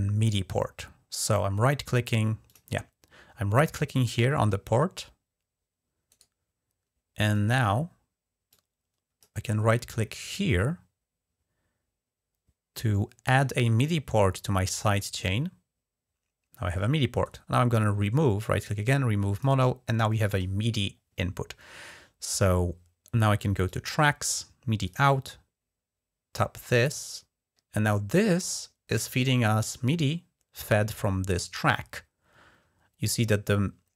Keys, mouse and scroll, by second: 2.2 click, 5.9 right click, 7.1 click, 8.3 click, 10.0 right click, 14.9 click, 17.0 right click, 19.1 click, 23.4 click, 24.6 click, 26.8 click.